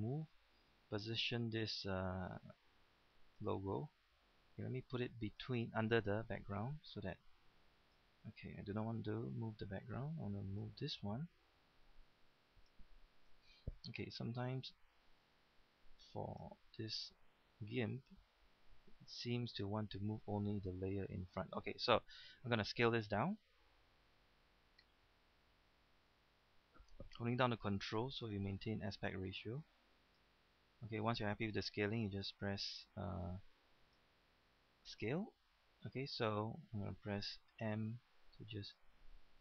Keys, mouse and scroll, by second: 9.0 ctrl+z, 13.3 ctrl+z, 32.1 Return, 37.6 m.